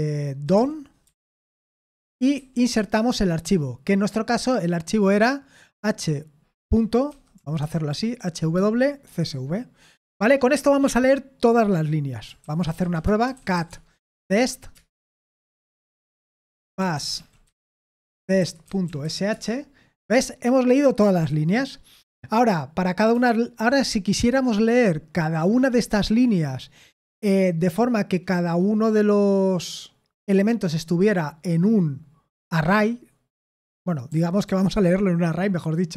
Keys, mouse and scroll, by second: 0.2-2.7 typing, 5.7-9.4 typing, 12.4-14.6 typing, 14.7 Return, 15.8-19.5 typing, 34.1 ctrl+p, 34.5 ctrl+p.